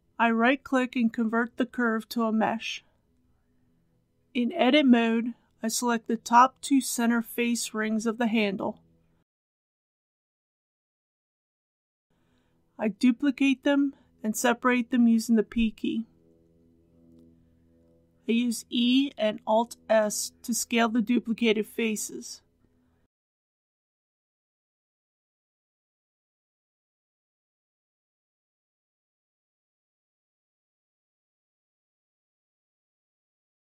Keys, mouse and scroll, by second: 1.9 click, 3.7 Return, 5.1 Tab, 6.9 scroll up 1, 8.5-9.3 scroll up 2, 9.8 alt+click, 11.4 alt+shift+click, 13.3 shift+d, 14.9 p, 15.5 click, 16.4 Tab, 22.2 e, 24.1 alt+s, 29.3 click, 29.9-31.1 middle drag, 31.2 a, 31.7 middle click, 33.0 KP_3.